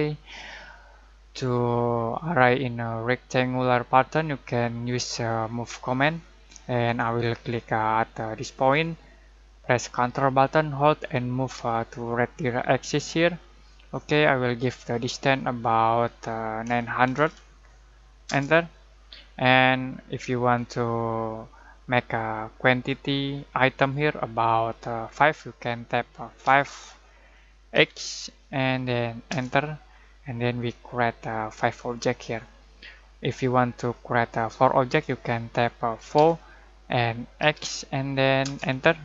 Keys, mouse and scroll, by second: 0.9-1.4 scroll down 1, 5.9 click, 8.5 click, 16.4-17.7 typing, 18.2 Return, 26.4 5, 29.3 Return, 30.4-30.9 scroll down 1, 36.1 4, 37.4 x, 38.4 Return.